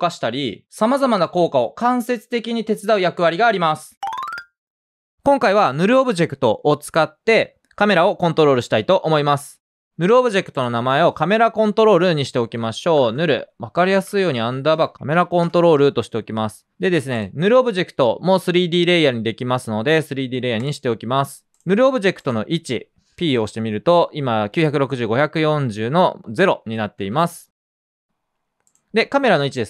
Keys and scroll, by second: 11.9 Return, 12.5 Down, 12.9-15.9 typing, 14.7 super+space, 17.0 typing, 22.4-23.2 typing, 27.4 super+space.